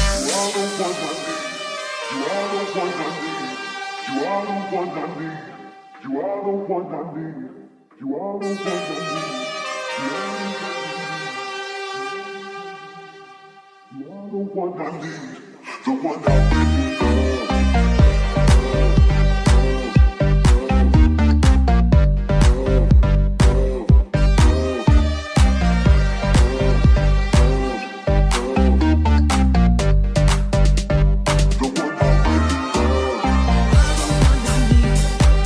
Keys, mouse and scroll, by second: 3.4 click, 4.0-5.2 drag, 5.3 click, 6.1 ctrl+click, 7.4-24.2 drag, 19.7 ctrl+Tab, 21.6 right click, 22.0 middle click, 22.0 right click, 22.4 Tab, 23.3 alt+middle click, 23.3 alt+right click, 24.9 shift+s, 25.7 alt+z, 26.4 alt+z, 26.5-35.4 drag, 27.0 Tab, 27.3 shift+a.